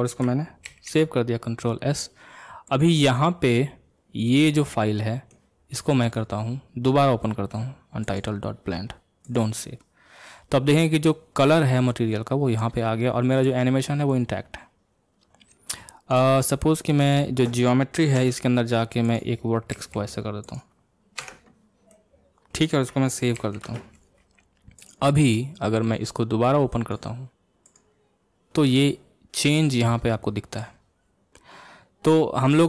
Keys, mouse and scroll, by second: 0.7 ctrl+s, 17.0 click, 18.2 Tab, 19.0 click, 19.7 g, 21.2 Tab, 21.9-23.4 middle drag, 23.4 ctrl+s.